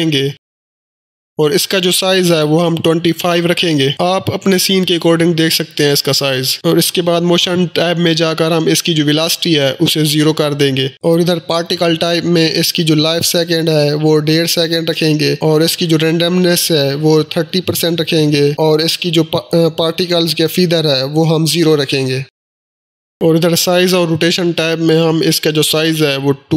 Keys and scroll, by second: 5.6 2, 6.0 5, 6.2 Return, 10.1 0, 10.3 Return, 13.5-16.0 typing, 16.2 Return, 26.0 2, 26.2 Return.